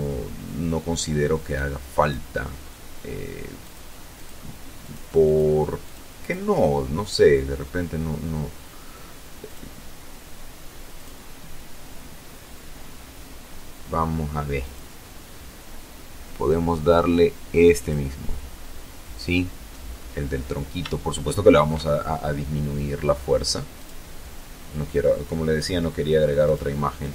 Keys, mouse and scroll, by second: 0.3 click, 0.8 click, 2.5 click, 3.0 click, 3.7 click, 4.1 click, 4.7 click, 5.1 click, 8.3 click, 9.8 click, 13.4 click, 13.4 middle click, 13.4-13.8 scroll down 1, 16.6 click, 18.7-19.1 scroll up 2, 19.6-20.6 shift+middle drag, 22.6 click, 25.3 click, 25.9 click, 26.4 click.